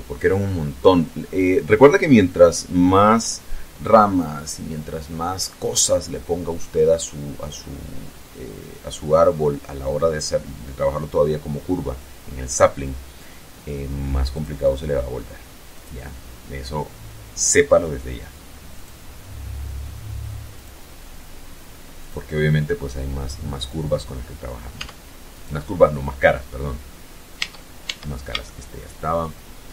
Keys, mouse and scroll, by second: 13.7 click, 15.1 click, 18.1 click, 19.9 click, 21.4 click, 24.1 Tab, 24.7 right click, 26.7 Tab, 27.8-29.3 shift+middle drag, 29.5-29.7 shift+scroll down 3.